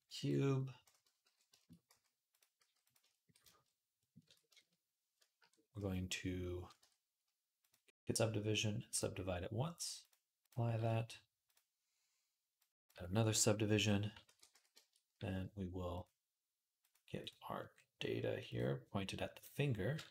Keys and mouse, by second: 1.0 alt+g, 1.1 alt+click, 1.3 shift+click, 1.5-2.8 right drag, 1.7 s, 2.4 s, 2.8 shift+click, 3.1 right click, 3.2 shift+click, 3.4 right click, 4.1 Tab, 4.3 shift+click, 4.5-12.8 right drag, 6.6 Tab, 7.6-12.8 drag, 14.1 ctrl+a, 14.1-15.9 drag, 14.1-20.0 right drag, 16.6 click, 20.0 alt+click.